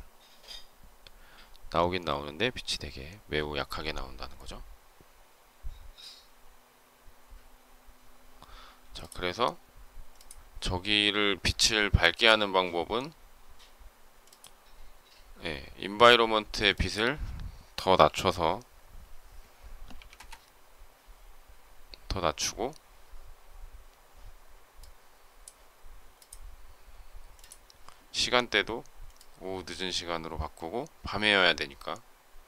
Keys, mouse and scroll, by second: 20.0 Return.